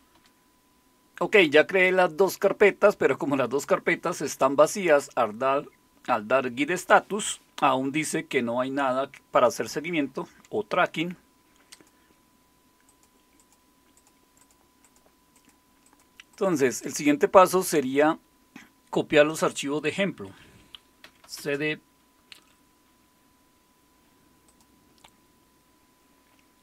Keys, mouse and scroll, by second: 0.0-0.4 typing, 11.7 click, 12.9-14.1 drag, 14.4-17.5 drag, 19.3 click, 20.8-21.8 typing, 24.5 click.